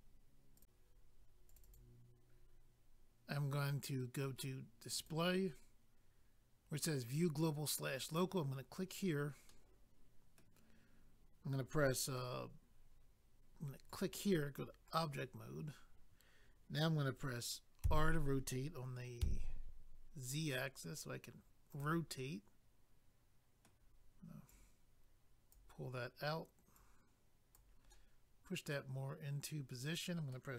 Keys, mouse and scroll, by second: 0.5 click, 0.6 click, 1.5 click, 1.6 click, 1.6 click, 2.9 double click, 5.0 click, 5.1 click, 8.0 click, 8.2 click, 9.0 scroll down 1, 9.5 middle click, 13.9 click, 14.0 click, 14.9 click, 15.0 click, 21.7 click, 21.8 click, 22.1 middle click, 24.5 click, 27.9 middle click.